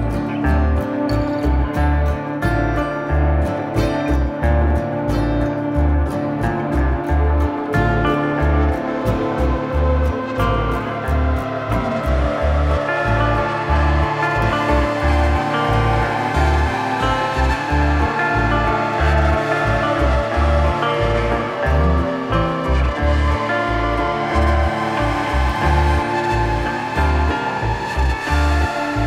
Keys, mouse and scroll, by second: 0.0 click, 0.4 middle click, 5.6 click, 6.0 ctrl+space, 6.2 middle click, 6.4 click, 8.0 click, 12.1 click, 12.8 click, 14.0 click, 15.9 click, 18.1 middle click, 18.8 middle click, 20.6 middle click, 23.2 middle click, 24.0-25.0 scroll down 1, 25.0 middle click, 25.4 scroll up 1, 25.6 shift+middle click, 26.2 middle click, 26.9 middle click, 28.4 click.